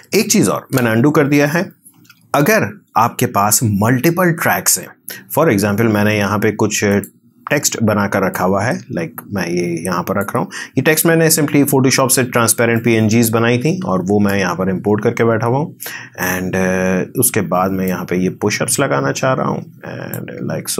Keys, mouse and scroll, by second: 1.5-12.7 drag, 12.7-17.8 drag, 17.8-20.5 drag, 20.5 scroll down 1.